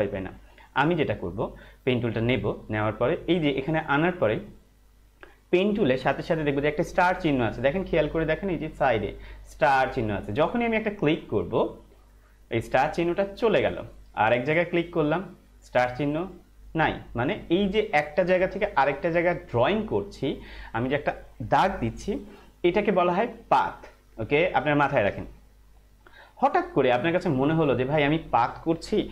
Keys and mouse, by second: 2.1 click, 11.5 click, 14.7 click.